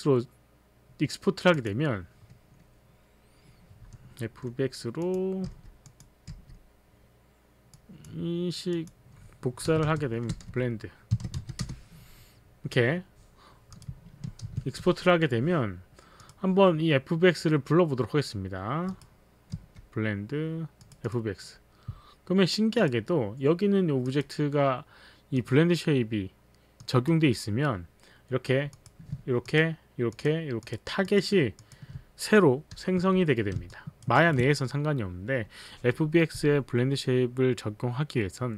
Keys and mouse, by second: 1.5 click, 1.8 click, 5.0 click, 5.5 f, 6.3 click, 6.3 f, 7.8 click, 9.7-12.1 typing, 12.2 Return, 13.8 click, 14.7 n, 16.2 click, 18.9 click, 19.6 b, 20.8 click, 21.1 click, 22.7 click, 24.1 click, 25.4 click, 26.8 click, 28.8 click, 29.4 ctrl+click, 30.2 ctrl+click, 30.6 ctrl+click, 31.5 ctrl+click, 31.6 ctrl+click, 33.0 h, 33.7 alt+click, 34.1 alt+right click.